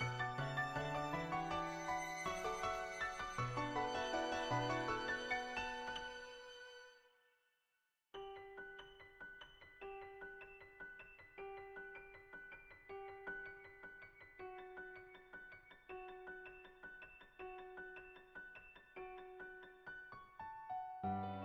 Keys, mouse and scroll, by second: 1.7 r, 6.9-9.2 middle drag, 9.4 shift+middle click, 10.2 click, 11.8-13.0 middle drag, 14.1 r, 16.4 click, 16.7-18.0 middle drag, 18.3 middle click, 18.9 click, 20.1 Tab.